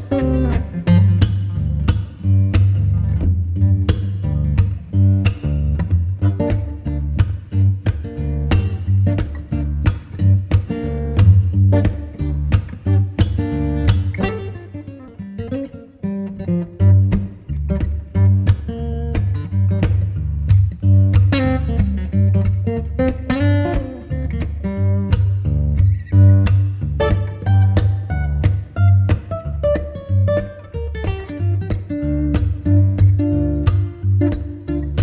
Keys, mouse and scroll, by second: 0.9-3.0 drag, 3.0-5.8 shift+middle drag, 5.8-8.8 drag, 9.3-16.3 drag, 16.3-18.0 middle drag, 18.0-18.5 scroll down 1, 18.5-21.6 middle drag, 22.1-35.0 drag.